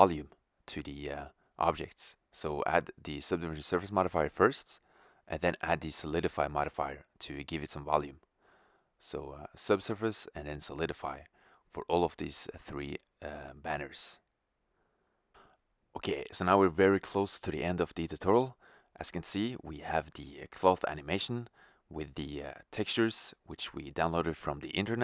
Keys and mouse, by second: 0.6-4.8 drag, 5.6 right click, 6.6-9.3 drag, 10.3-10.9 right drag, 11.2-14.0 drag, 15.2 middle click, 15.8 shift+z, 17.0 shift+z, 18.2 click, 19.7 middle click, 21.0 shift+z.